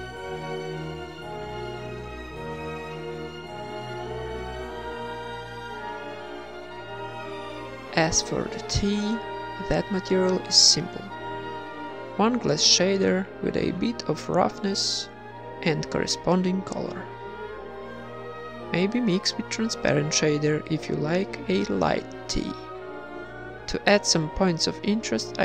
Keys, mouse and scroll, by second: 1.5-3.6 drag, 1.5-2.6 middle drag, 3.1 KP_0, 3.8-4.4 middle drag, 4.4-5.5 drag, 5.5 middle click, 5.7 click, 5.9 middle drag, 6.1-6.9 drag, 6.2 x, 6.3 shift+a, 8.6 click, 8.8 z, 10.8 middle click, 12.2 click, 13.8 click, 15.1 click, 17.2 ctrl+s, 17.7-18.6 drag, 20.0 ctrl+v, 20.3 ctrl+s, 22.7 ctrl+s, 22.7 KP_1, 22.7 KP_5, 22.9 z, 23.7 click.